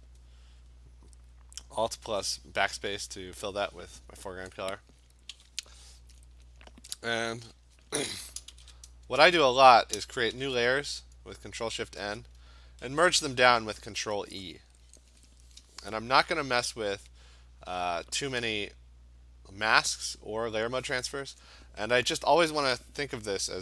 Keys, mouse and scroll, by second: 5.4 b, 8.5 ctrl+shift+n, 9.1 Return, 10.4 ctrl+shift+n, 11.6 Return, 12.9 ctrl+e.